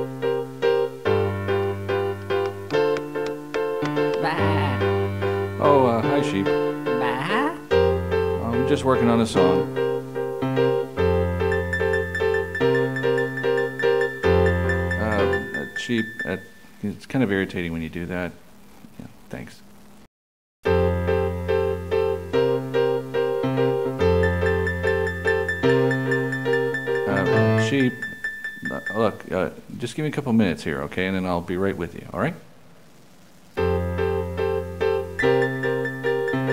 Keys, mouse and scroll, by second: 2.2 a, 2.4 middle click, 6.9 click, 10.5 click, 17.2 click, 18.7 click, 24.8 click.